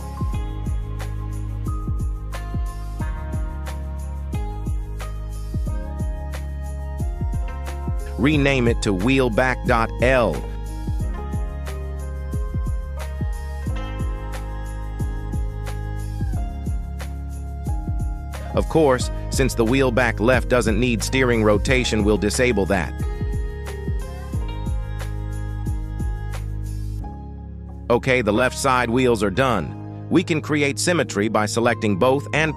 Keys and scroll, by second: 0.7 Tab, 1.7 shift+s, 2.5 KP_1, 9.2 F2, 10.7 BackSpace, 11.9 Left, 12.7 BackSpace, 14.1 b, 14.3 a, 14.5 k, 15.0 Return, 27.5 g, 28.1 Escape.